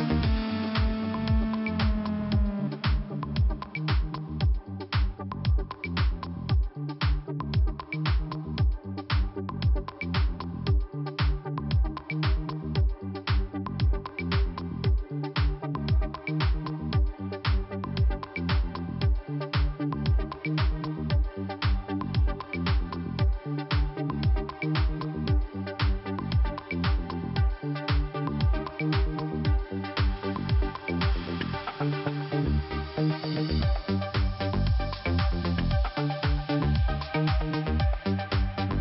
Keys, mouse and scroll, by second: 0.2 click, 1.8 click, 1.9 click, 3.2 click, 5.6 click, 5.7 click, 6.7 click, 8.7 click, 8.8 click, 9.8 click, 12.0 click, 12.5 click, 13.1 click, 16.5 middle click, 17.0 scroll up 1, 18.1 click, 20.7 click, 22.1 click, 24.0 click, 24.0 click, 25.5 click, 30.0 click, 31.7 click, 33.5 click, 33.6 click, 35.1 scroll down 1, 36.5 click, 37.6 click, 37.9 click, 38.0 double click.